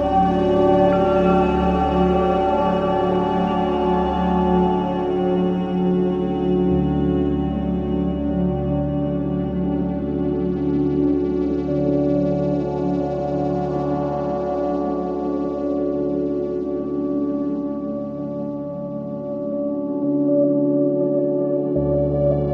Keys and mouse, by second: 3.6 Home, 6.0 click, 9.0-9.5 typing, 11.5 click, 12.4 click, 12.7-13.6 typing, 14.5 ctrl+z, 15.2 ctrl+z, 18.4-20.8 alt+shift+drag, 20.9 click.